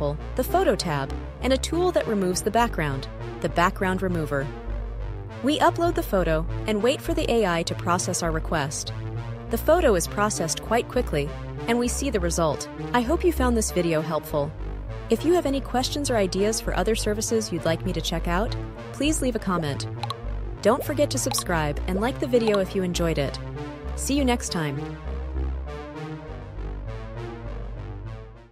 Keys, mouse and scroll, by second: 0.0 click, 2.1-3.5 drag, 4.4 super+b, 7.0 click, 8.8 click, 11.3-13.6 scroll down 2, 13.6-15.7 scroll down 1, 15.8-20.7 drag, 21.6 click, 25.5 click, 26.8-28.0 scroll.